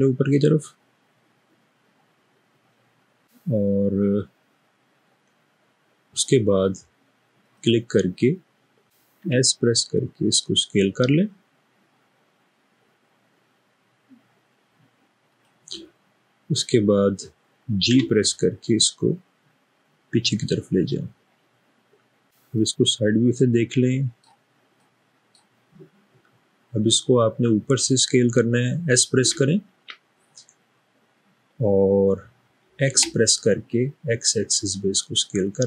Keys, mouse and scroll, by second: 9.4 s, 18.0 g, 22.7-24.2 middle drag, 24.8 middle click, 29.2 typing, 32.9 typing.